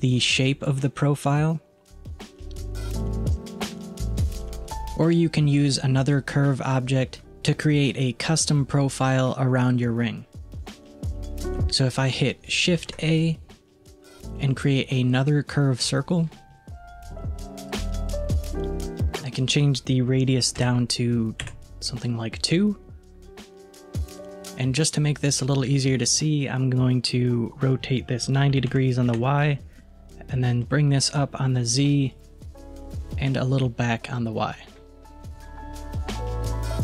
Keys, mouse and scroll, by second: 0.4-0.9 scroll down 1, 0.9 scroll down 1, 1.0-3.1 drag, 12.8 shift+a, 17.6-20.7 drag, 27.7-30.0 drag, 30.4-36.3 drag.